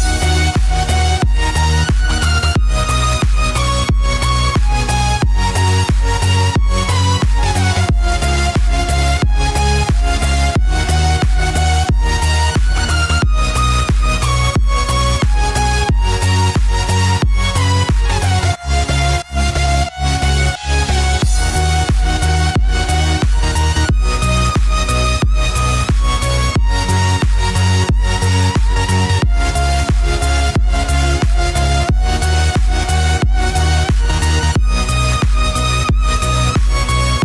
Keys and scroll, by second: 2.8 ctrl+v, 4.5-5.5 typing, 5.6 ctrl+s, 27.4 ctrl+c, 27.5 ctrl+v, 28.2-29.9 typing, 30.1 ctrl+s.